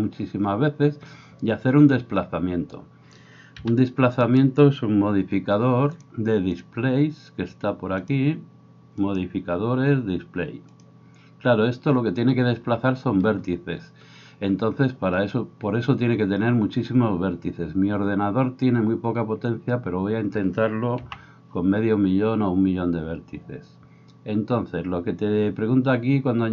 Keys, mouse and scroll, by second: 0.3-4.5 middle drag, 0.3-4.5 right drag, 3.6 b, 8.1-9.0 middle drag, 9.0-16.5 drag, 16.5-26.5 right drag, 21.0 n.